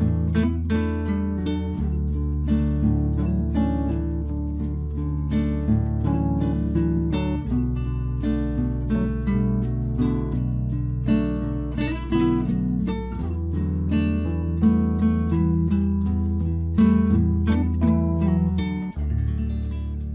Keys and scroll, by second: 18.4 Return.